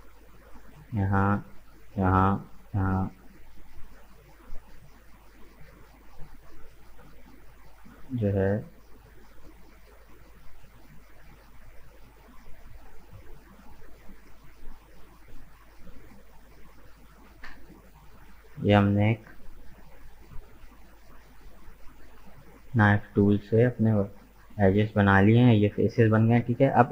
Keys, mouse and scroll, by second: 18.3-20.7 middle drag, 20.7-21.9 drag, 21.9 right click, 22.3 shift+right click, 22.8 shift+right click, 23.2 shift+right click, 23.5 shift+right click, 23.9 shift+right click, 24.3 shift+right click, 25.0 shift+right click, 25.5-26.9 middle drag.